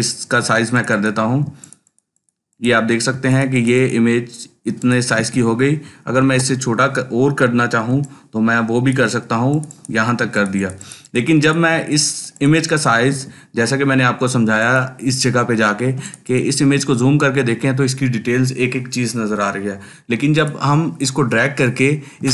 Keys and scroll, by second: 1.3 ctrl+space, 1.8 ctrl+space, 6.0 ctrl+t, 10.0 ctrl+space, 10.5 ctrl+space, 22.1 ctrl+space.